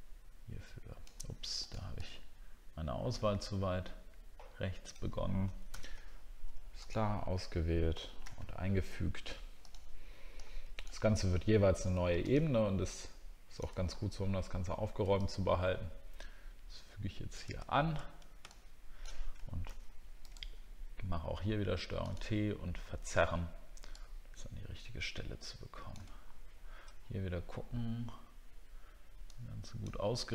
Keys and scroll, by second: 13.9 alt+scroll up 1, 14.5 alt+scroll up 1, 17.6 alt+scroll down 1, 19.3 alt+scroll down 1, 19.7 ctrl+t, 26.2-26.7 alt+scroll up 2.